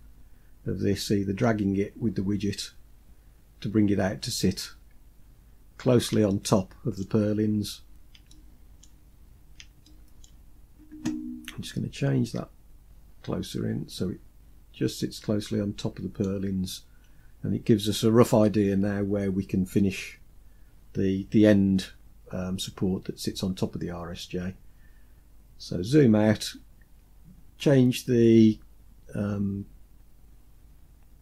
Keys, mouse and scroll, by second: 0.9-4.2 drag, 4.7-5.4 scroll up 3, 5.4-5.8 scroll up 3, 5.8 shift+middle click, 6.8-7.4 scroll up 3, 7.8 shift+middle click, 8.6 scroll up 3, 9.4 shift+middle click, 11.7-15.7 drag, 16.5-17.1 scroll down 2, 20.1-21.2 scroll down 4, 21.2-22.1 scroll down 1, 22.1-22.4 scroll down 1, 23.1-26.4 scroll down 2.